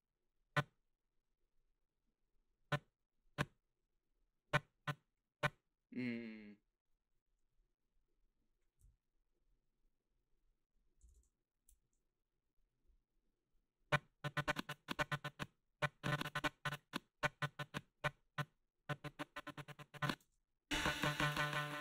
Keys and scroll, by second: 11.2 ctrl+c, 20.2 space.